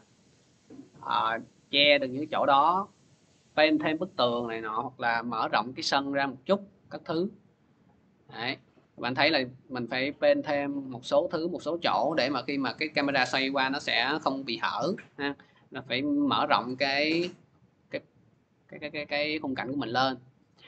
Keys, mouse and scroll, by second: 0.6 click, 0.9 click, 1.7 scroll, 5.7 click, 6.9 scroll, 7.3 click, 7.5 click, 8.2-10.8 scroll, 13.3 scroll down 2, 19.3 click.